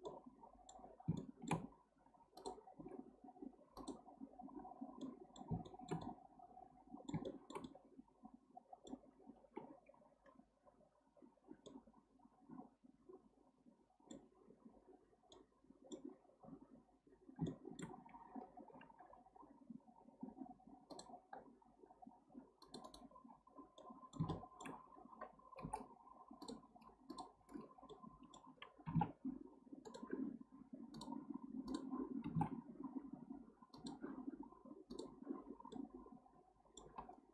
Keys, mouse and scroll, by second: 0.1-0.9 middle drag, 0.9 scroll up 1, 1.2-1.6 shift+middle drag, 1.6-2.3 scroll up 1, 2.3 scroll up 1, 2.4 drag, 2.8 x, 4.7 scroll down 1, 5.0-10.7 middle drag, 11.7-14.7 middle drag, 15.3-16.1 middle drag, 16.1-17.0 scroll up 1, 17.0-17.5 scroll up 1, 17.5-18.7 shift+middle drag, 18.7 k, 23.8-25.6 middle drag, 25.6 k, 27.9-28.9 middle drag, 28.9 g, 30.9 click, 32.2 g, 35.0 click, 35.7-37.3 middle drag.